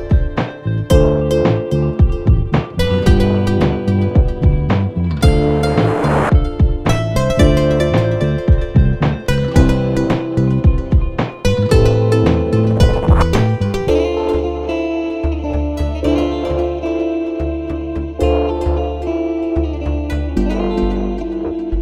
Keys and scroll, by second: 0.0-0.7 typing, 2.9 ctrl+=, 6.4 ctrl+z, 7.9 ctrl+-, 16.6 ctrl+c, 17.6 ctrl+v.